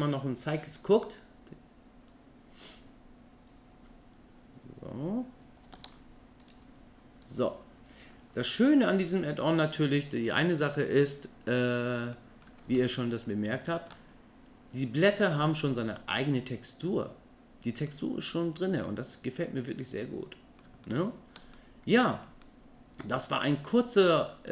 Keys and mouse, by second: 2.1 click, 6.5 alt+a, 6.5 click, 12.2 middle click, 12.8-13.9 ctrl+middle drag, 17.9-20.6 middle drag, 20.8-21.4 ctrl+middle drag, 21.5-22.3 middle drag, 22.4-23.7 middle drag, 24.1-24.5 middle drag.